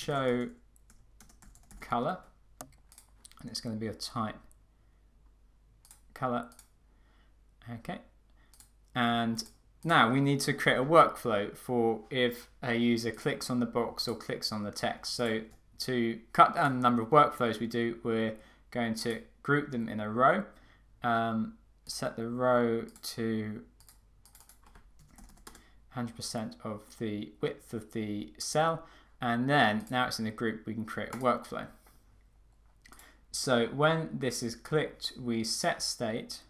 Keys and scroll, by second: 25.6 Return.